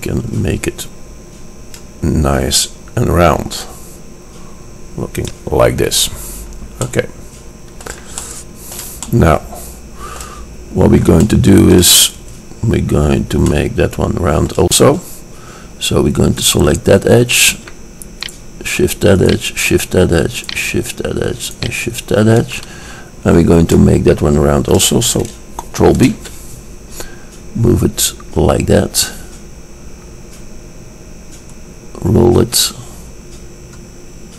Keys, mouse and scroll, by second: 6.1-7.1 middle drag, 8.0-8.5 middle drag, 16.8-23.6 middle drag, 25.7 middle click, 26.3 ctrl+b.